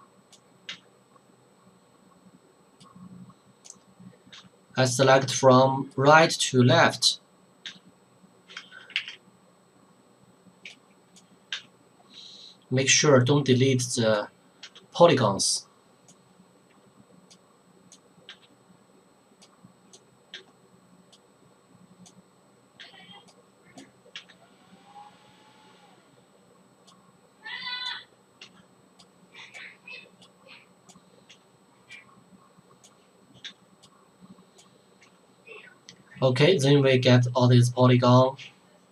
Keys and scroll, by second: 4.3 Delete, 7.7 Delete, 9.0 ctrl+z, 11.5 Delete, 14.7 Delete, 22.8 Delete, 28.4 Delete, 31.3 Delete.